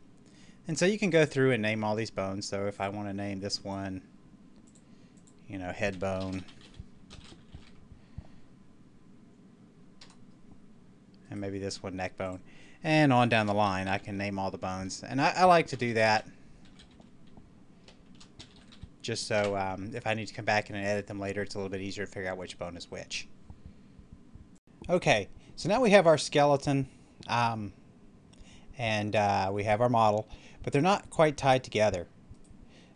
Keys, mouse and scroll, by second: 2.6 click, 3.4 right click, 4.5 click, 6.1-7.5 typing, 11.1 right click, 12.1 click, 13.3-14.0 typing, 15.5 BackSpace, 16.5 typing, 18.2-18.5 typing, 19.2 Return, 24.4 click, 24.5 middle click, 25.3 scroll up 1, 27.5-29.3 scroll down 1, 32.3 right click.